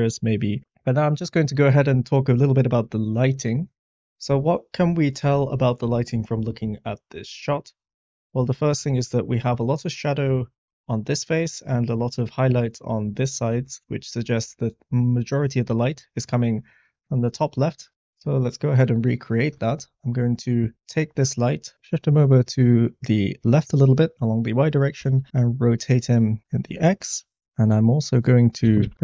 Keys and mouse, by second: 3.8 click, 19.5 middle click, 20.4 middle click, 21.7 g, 21.7 y, 24.9 r, 25.2 x, 26.2 click, 26.4-27.4 middle drag, 28.6 g, 28.8 y, 28.9 x.